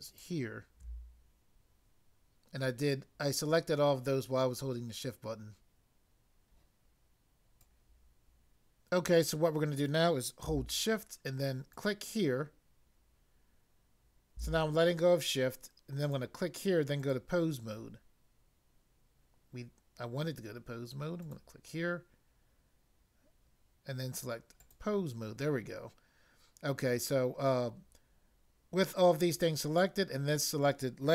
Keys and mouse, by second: 0.1 shift+click, 7.6 click, 7.7 click, 11.8 shift+click, 16.1 click, 17.0 click, 21.2 click, 24.7 click.